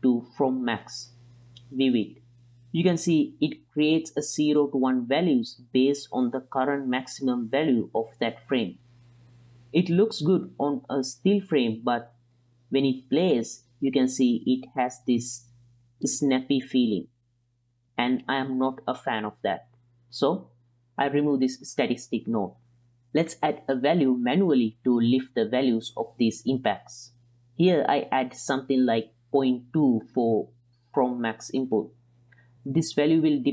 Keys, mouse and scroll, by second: 3.4-7.9 middle drag, 9.1-9.6 middle drag, 10.6 click, 12.0 space, 15.8-18.1 middle drag, 20.4 space, 21.2 x, 22.5-23.6 drag, 23.9 middle click, 24.6-25.7 drag, 25.9-26.3 middle drag, 26.5 ctrl+middle drag, 28.7-31.5 drag, 33.1-33.5 middle drag.